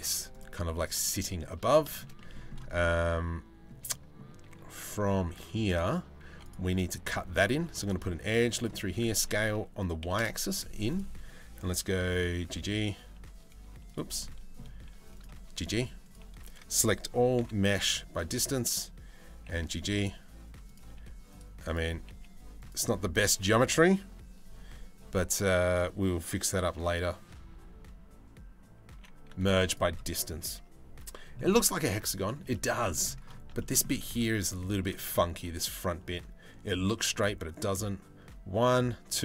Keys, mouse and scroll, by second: 0.3-1.0 middle drag, 1.2 Tab, 1.5 shift+middle click, 1.7 middle click, 2.4 middle click, 3.5 middle click, 6.7 middle click, 7.1 ctrl+r, 8.5 s, 11.8 g, 13.8 middle click, 14.8 click, 15.0 g, 16.0 a, 17.0 m, 17.9 click, 19.0 g, 20.2 click, 20.5 g, 23.0 a, 28.7 m, 31.3 middle click, 32.1 middle click, 32.5 shift+middle click, 33.2 shift+middle click, 33.8 shift+middle click.